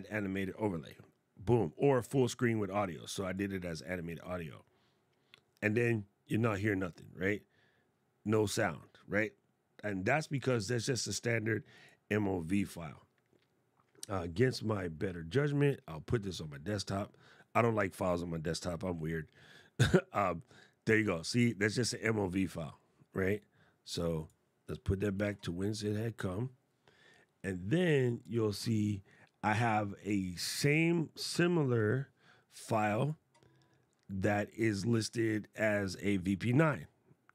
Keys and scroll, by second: 24.9 super+z.